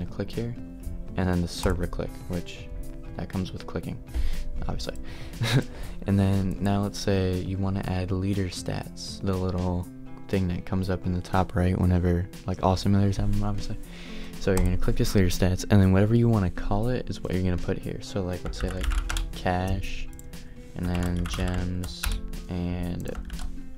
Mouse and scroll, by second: 0.0 click, 16.1-23.7 drag.